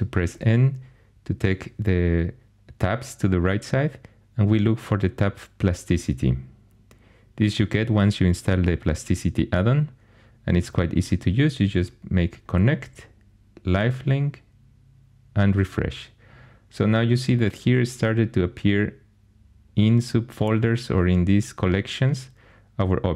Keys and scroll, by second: 0.3 n.